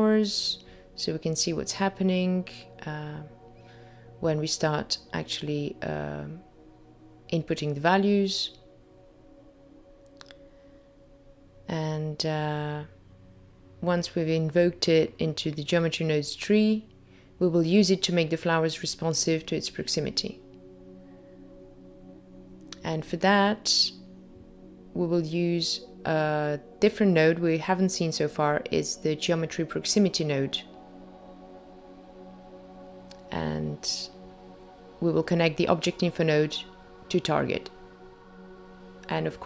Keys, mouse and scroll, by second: 1.4 click, 7.7 middle click, 9.9-11.3 scroll down 3, 10.4 middle click, 13.5 middle click, 14.1 click, 15.2 shift+a, 15.3 click, 19.0 click, 23.3 click, 26.6 shift+a, 33.2 click, 35.9 click, 36.7-37.1 scroll up 3, 37.1 middle click, 37.7-38.1 scroll up 2, 38.1 middle click.